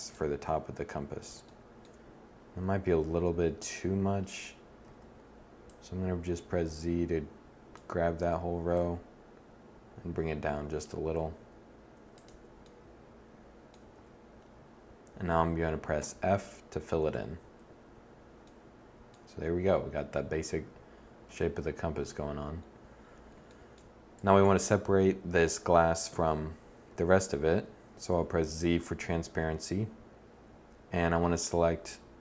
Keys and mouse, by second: 0.3 KP_1, 3.2 a, 3.4 z, 4.6 b, 8.5-10.5 drag, 13.7 z, 15.8 f, 16.7 Tab, 21.0 1, 24.0 Tab, 25.1 a, 27.8 z.